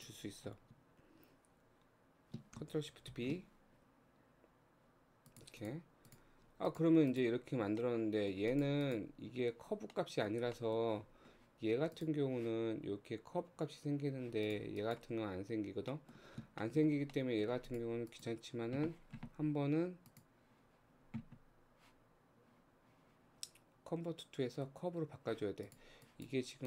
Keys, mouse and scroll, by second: 3.1 ctrl+shift+b, 5.6 click, 6.1 click, 6.4 Tab, 6.7 click, 7.1 click, 7.8 middle click, 8.5 click, 8.8 click, 9.9-11.1 middle drag, 11.1 scroll down 2, 12.0 click, 14.5 click, 14.8 click, 15.5-15.9 scroll up 1, 15.9 middle click, 16.5-17.1 shift+scroll up 2, 16.6 shift+middle click, 17.1 middle click, 17.7 click, 18.1 click, 20.0-23.3 drag, 25.6 click, 26.1 click.